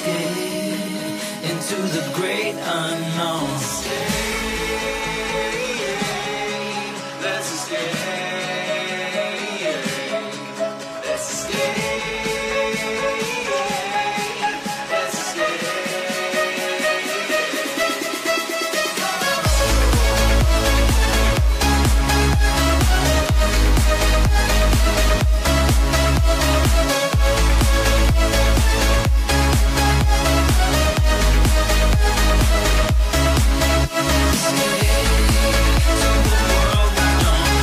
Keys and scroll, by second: 34.9 Escape.